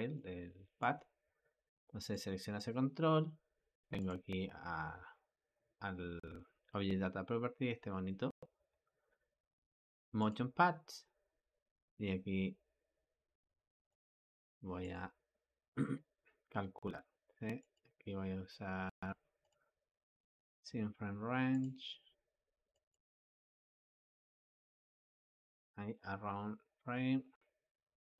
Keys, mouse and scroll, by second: 0.0-2.0 shift+middle drag, 2.0 click, 2.5 click, 13.7 click, 14.8 click, 22.8-28.1 drag.